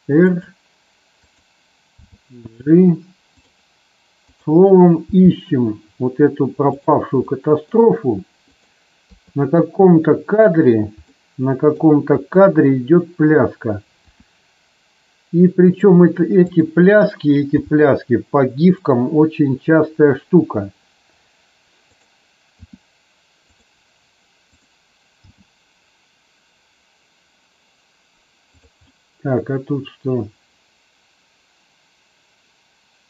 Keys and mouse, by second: 0.2 click, 1.1 click, 2.0 g, 4.2 click, 5.1 g, 7.2-7.6 middle drag, 8.5 click, 9.2 KP_3, 11.1 middle click, 14.0 r, 15.6 click, 17.5 g, 21.8 click, 22.6 r, 23.4 click, 24.5 click, 25.2 g, 28.5 click, 28.7-33.0 middle drag.